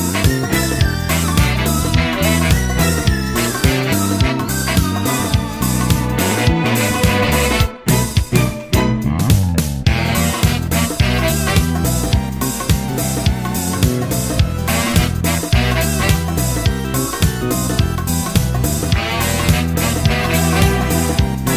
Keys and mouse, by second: 7.5 middle click, 8.9 middle click, 9.4 middle click, 11.3 middle click, 12.6 middle click, 13.9 middle click, 15.9 middle click, 16.5 middle click, 18.2 middle click, 19.3 middle click, 19.9 middle click, 20.2 middle click, 20.9 middle click.